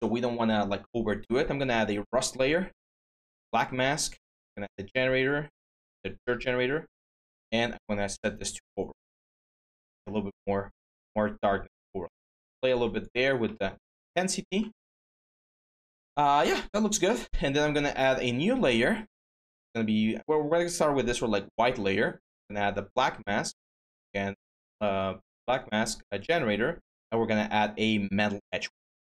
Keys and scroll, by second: 0.0-0.2 typing.